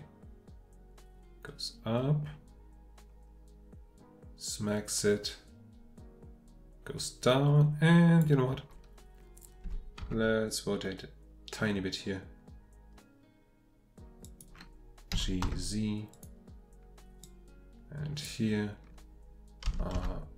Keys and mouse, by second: 9.6 r, 10.0 x, 15.1 g, 15.4 z, 16.1 drag, 18.1 click, 19.6 r, 19.9 x.